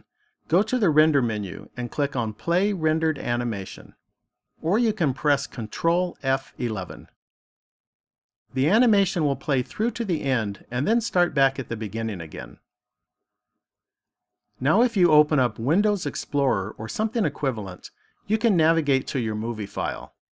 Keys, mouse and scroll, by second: 0.9 click.